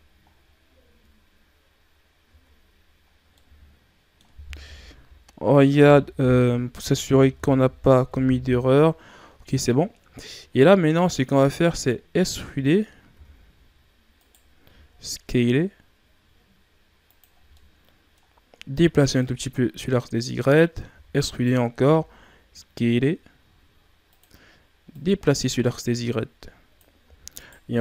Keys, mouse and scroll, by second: 0.2-0.8 scroll up 3, 0.8 Tab, 2.2 Tab, 3.0 scroll down 2, 3.3-4.5 middle drag, 4.5 KP_3, 8.1 KP_1, 9.8-11.7 scroll up 2, 12.2 Tab, 13.1 e, 17.3 scroll down 2, 17.5 middle click, 18.3-19.1 scroll up 2, 19.1-20.9 drag, 20.9 e, 24.9-27.0 drag, 27.0 e.